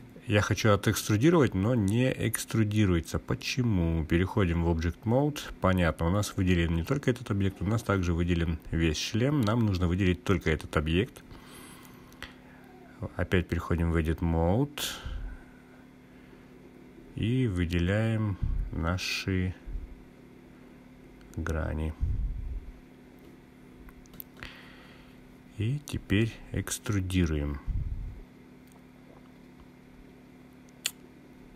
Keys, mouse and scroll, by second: 3.6 click, 5.1-6.6 drag, 8.6-9.7 drag, 10.2 click, 13.2-14.0 drag, 15.5 click, 21.9 click, 23.6-25.9 drag, 27.0 click, 30.8 a, 31.0 e.